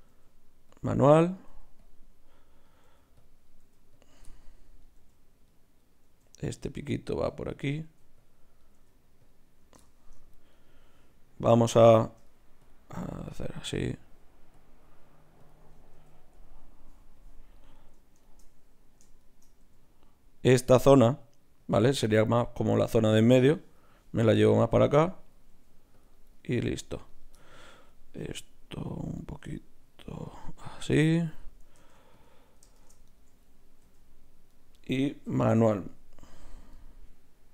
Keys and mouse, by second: 0.1 g, 1.5 g, 2.8 g, 3.6 g, 5.0 g, 6.0 g, 7.1 g, 7.8 g, 8.8 g, 12.6-14.4 drag, 14.4 middle click, 14.5-16.3 drag, 16.0 g, 18.2-20.9 right drag, 19.6 g, 23.7-29.0 right drag, 24.1 g, 25.5 g, 26.3-29.0 drag, 29.0 middle click, 29.2-30.8 right drag, 29.4 g, 31.8 ctrl+Tab, 32.7 shift+Tab, 33.8 g, 35.2 o, 35.6 o, 36.7-37.5 right drag.